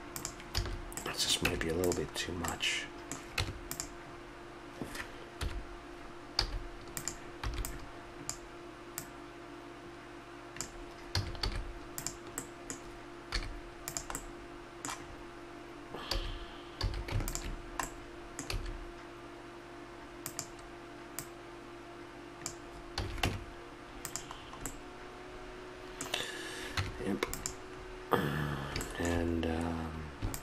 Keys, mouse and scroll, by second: 0.6 a, 1.0 middle click, 1.5 Tab, 3.3 Tab, 5.3 middle click, 5.4 KP_1, 6.4 z, 7.5 b, 9.0-10.7 drag, 11.1 a, 11.5 z, 13.4 z, 16.1 a, 16.9 a, 17.6-18.8 drag, 18.5 s, 23.0 a, 23.2 Tab, 24.7 middle drag, 25.4-26.5 middle drag, 26.8 Tab.